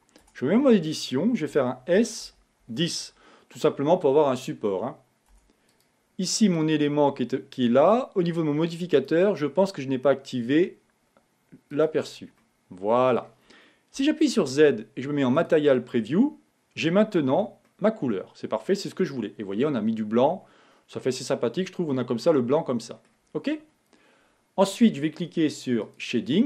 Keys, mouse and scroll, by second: 0.5 Tab, 1.8 s, 5.6 Tab, 6.0 click, 9.2 click, 12.1 click, 12.7-14.3 middle drag, 14.3 z, 17.5-18.8 scroll down 1, 18.8-21.8 middle drag.